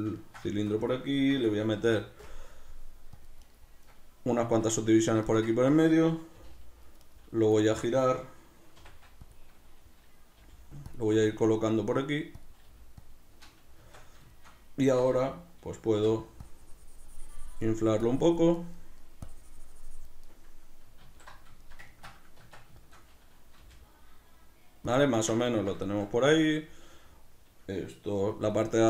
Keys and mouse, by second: 0.2-3.4 ctrl+shift+middle drag, 1.1 Tab, 3.5 right click, 4.5 Tab, 5.3-7.1 ctrl+shift+middle drag, 6.3 g, 7.1 right click, 7.6-9.3 ctrl+middle drag, 8.8 r, 9.3 click, 10.4 g, 11.0 click, 11.1 s, 12.5 click, 12.7 g, 13.1 click, 13.8 Tab, 13.9 b, 14.3-16.4 shift+middle drag, 16.4 click, 18.6 middle click, 19.3 click, 20.3-28.8 middle drag, 21.0 q, 22.4 b, 22.5 Tab, 23.6 g, 24.9 click.